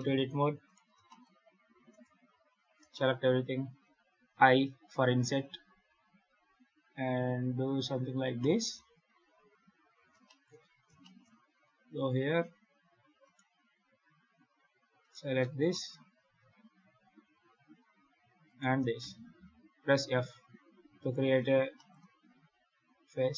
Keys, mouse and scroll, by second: 0.3 3, 0.5 right click, 0.9 shift+middle click, 2.2 a, 2.4 scroll down 2, 2.8 shift+middle click, 4.2 i, 10.1 shift+middle click, 10.5-10.9 scroll up 6, 10.9 shift+middle click, 11.2 scroll down 1, 11.3-11.8 scroll up 3, 11.8 2, 13.1 right click, 14.9 right click, 15.6 shift+middle click, 18.3 shift+right click, 18.9 f, 20.9 right click, 21.6 shift+middle click, 23.2 right click.